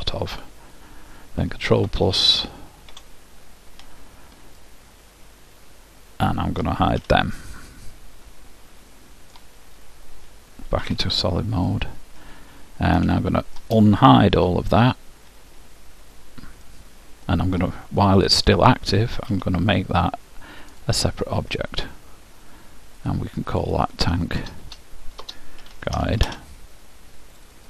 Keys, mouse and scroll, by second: 1.9 ctrl+KP_Add, 4.8-6.8 middle drag, 7.2 h, 7.8-9.8 middle drag, 11.0 z, 11.8 middle click, 14.6 alt+h, 17.0-18.6 middle drag, 19.5 p, 23.2-25.8 drag, 24.8 BackSpace.